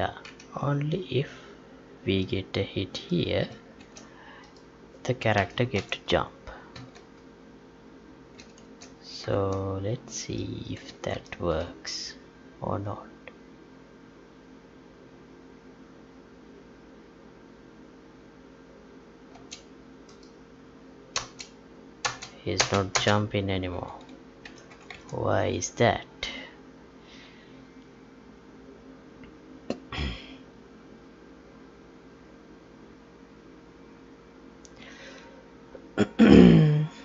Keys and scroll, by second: 3.8 ctrl+x, 5.3 Delete, 5.7 ctrl+v, 6.7 ctrl+s, 8.6 ctrl+s, 9.5 alt+Tab, 11.1 ctrl+p, 19.3 space, 21.1 space, 24.4 ctrl+p, 25.1 Tab.